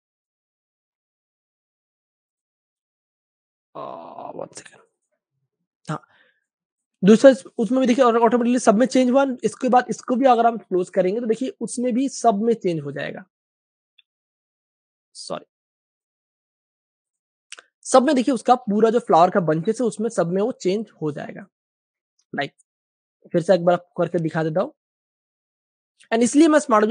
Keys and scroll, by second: 6.3 super+space, 7.9 super+space, 8.0 super+space, 9.2 super+w, 9.9 Return, 11.2 v, 18.8 v, 21.3 space, 22.1 v.